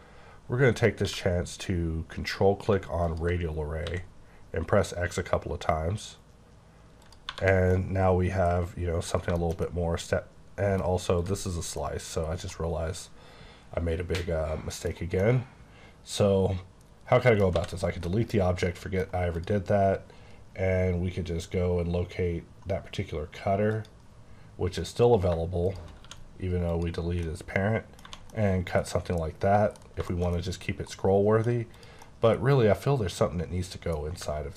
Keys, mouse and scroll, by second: 1.0 q, 3.1 ctrl+click, 3.9 x, 4.4-5.4 scroll down 3, 5.4-6.1 scroll up 1, 6.1-7.0 scroll up 1, 7.0 click, 7.3 1, 7.5 scroll down 3, 7.7 middle click, 9.1 scroll down 1, 9.4 shift+middle click, 11.2 click, 11.8 middle click, 12.2 scroll down 1, 13.5 scroll down 1, 15.2 middle click, 17.5 x, 17.7 click, 18.1 middle click, 19.3 click, 20.5-22.7 scroll down 8, 22.7 scroll, 22.8-23.7 scroll up 6, 23.7 click, 24.8 click, 26.0 q, 26.7 click, 27.2 middle click, 28.0 1, 28.3 middle click, 29.8 scroll down 2, 30.1 shift+middle click, 30.4 middle click, 31.7 click, 32.0 middle click.